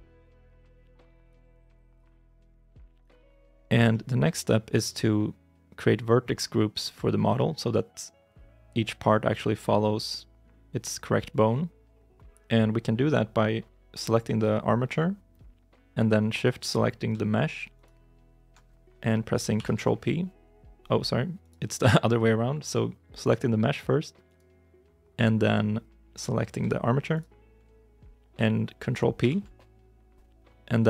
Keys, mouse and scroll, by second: 1.4 shift+middle click, 3.8 shift+middle click, 4.3-5.5 scroll down 1, 17.6 shift+right click, 19.4 ctrl+p, 21.3 right click, 24.1 right click, 27.0 shift+right click, 29.1 ctrl+p.